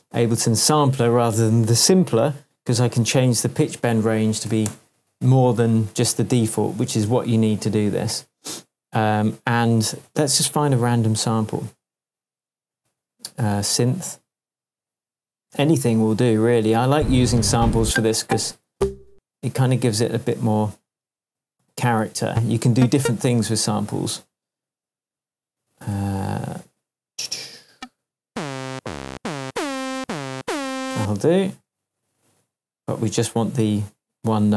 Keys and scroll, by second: 4.1-5.0 typing, 13.8 Right, 16.8 Down, 17.4 Up, 21.4 Down, 22.0 Right, 22.2 Down, 23.7 Left, 25.0 Down, 25.9 Up, 26.5 Up, 27.5 Right, 27.6 Down, 28.7 Up, 29.1 Down, 29.9 Up, 30.3 Down.